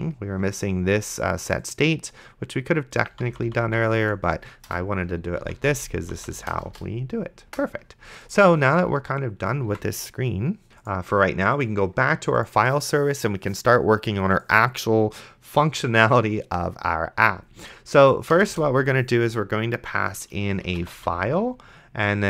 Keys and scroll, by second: 3.1 d, 4.7 BackSpace, 5.4 d, 6.5 BackSpace, 9.9 ctrl+s, 18.6 Return, 20.5-21.5 typing.